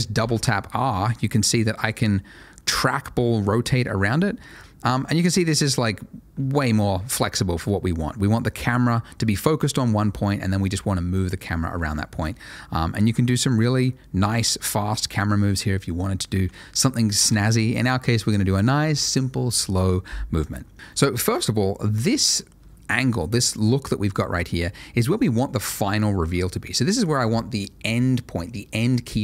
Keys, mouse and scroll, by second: 0.1 r, 0.3 r, 16.3 Escape.